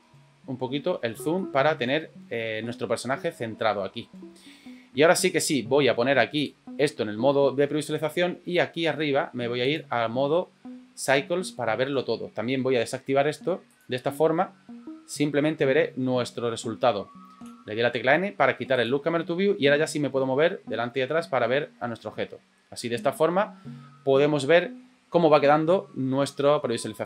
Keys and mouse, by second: 1.4 shift+middle click, 2.7 ctrl+middle click, 3.3 shift+middle click, 6.4 click, 9.6 click, 13.7 click, 17.4 n, 18.8 click, 19.6 n.